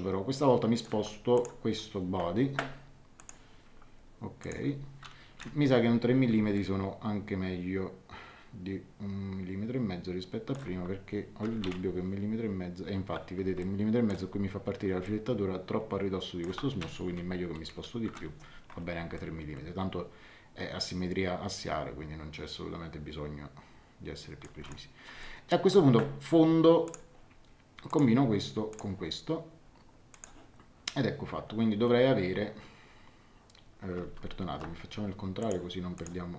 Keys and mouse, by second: 1.3 click, 3.1 click, 4.4 click, 5.3 KP_3, 6.5 middle click, 11.5 KP_1, 11.6 KP_Decimal, 11.7 KP_5, 13.6 middle click, 15.0 middle click, 17.1 KP_3, 18.0 Return, 19.1 middle click, 24.6 middle click, 25.2 middle click, 26.8 click, 30.1 click, 34.0 ctrl+z, 35.4 click.